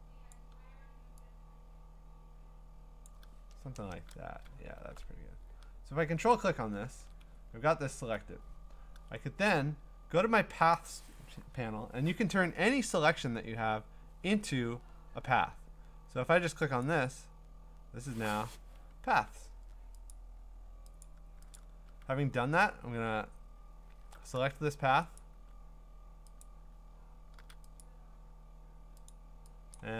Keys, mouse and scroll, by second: 0.3 click, 3.0 click, 3.8 Return, 4.5 scroll, 6.4 ctrl+click, 7.3-7.7 scroll, 10.8 click, 11.4-13.8 drag, 16.8-17.9 drag, 20.1 click, 21.0 click, 21.6 click, 22.7-23.5 scroll up 9, 23.5-23.9 scroll down 8, 23.9 scroll, 25.2 click, 25.4 a, 26.4 click, 27.4 a, 29.1 click, 29.8 click.